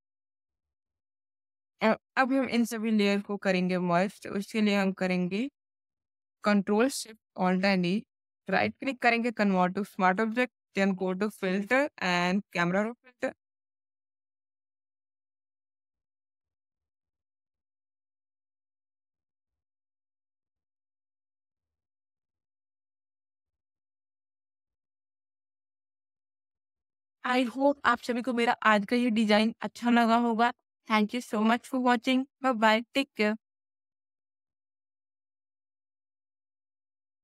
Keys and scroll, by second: 7.4 ctrl+alt+shift+e.